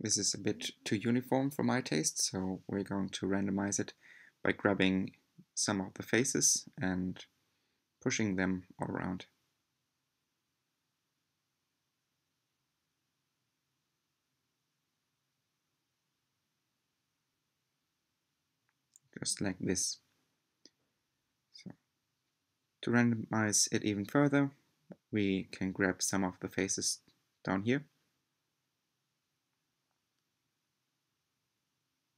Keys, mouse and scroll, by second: 1.3 click, 3.1 g, 4.2 click, 4.5 g, 5.9 click, 6.1 g, 7.3 click, 7.5-20.1 typing, 8.1 click, 8.4 click, 8.9 click, 9.2 click, 9.7 click, 10.1 click, 10.5 click, 10.9 click, 11.6 click, 12.4 click, 12.8 click, 13.2 click, 13.7 click, 14.1 click, 14.5 click, 14.8 click, 15.5 click, 15.9 click, 16.3 click, 16.6 click, 16.9 click, 17.5 click, 17.9 click, 18.3 click, 18.9 click, 19.2 click, 19.6 click, 20.1 click, 20.9-21.5 scroll down 8, 21.7-25.9 middle drag, 25.9-27.1 scroll up 3, 27.1 click, 28.0 shift+click, 28.6 shift+click, 29.4 shift+click, 30.4 shift+click, 31.1 shift+click, 31.8 shift+click.